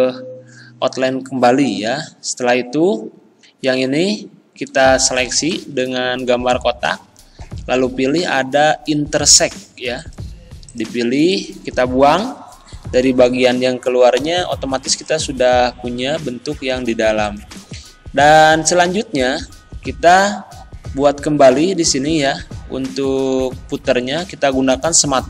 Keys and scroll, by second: 6.3 ctrl+z, 14.2 Delete.